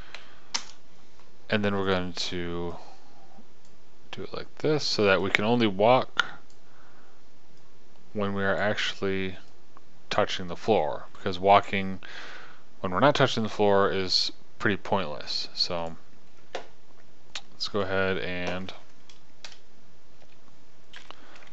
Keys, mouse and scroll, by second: 3.3 click, 5.1 click, 10.1-13.3 drag, 19.9 KP_0, 21.4 p.